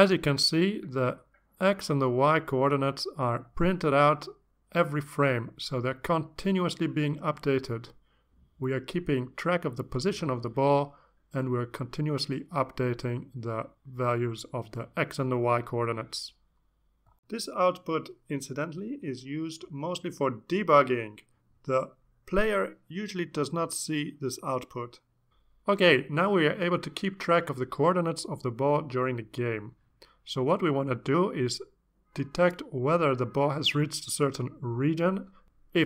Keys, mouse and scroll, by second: 0.2-3.2 drag, 10.4 click.